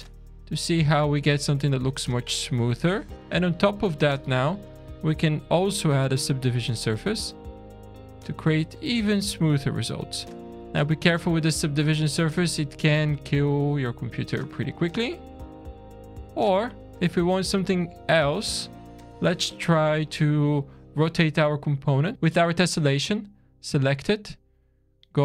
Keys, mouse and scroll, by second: 0.9 click, 2.5 click, 6.0 click, 6.8 scroll up 2, 8.9 click, 9.6 scroll down 2, 10.1 shift+middle click, 11.0 alt+a, 11.3-11.8 scroll up 6, 12.0-12.6 scroll down 8, 13.2 click, 14.3 middle click, 14.8 scroll down 1, 18.1 scroll down 1, 18.6 shift+middle click, 19.2 click, 19.8 click, 23.0 click, 23.6 scroll down 4, 24.6-25.2 scroll down 1.